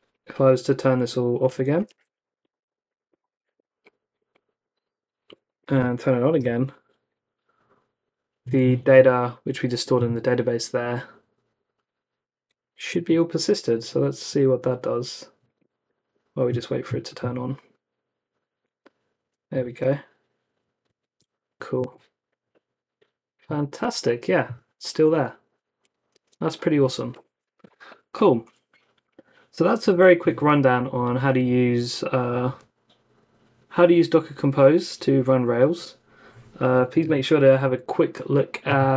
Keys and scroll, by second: 1.4-3.9 typing, 4.9 Up, 5.2-6.8 typing, 12.9 super+Tab, 20.8 super+Tab, 21.7 super+r, 26.1 super+Tab, 36.9 super+Tab.